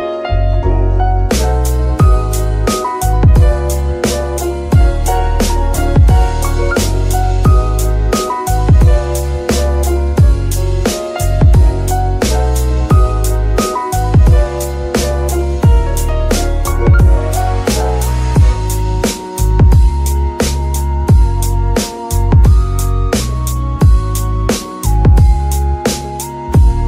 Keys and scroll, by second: 16.1-16.7 typing, 19.6 w, 21.2 BackSpace, 22.3-24.2 typing, 24.5 Return, 26.2 g, 26.2 f, 26.3 z.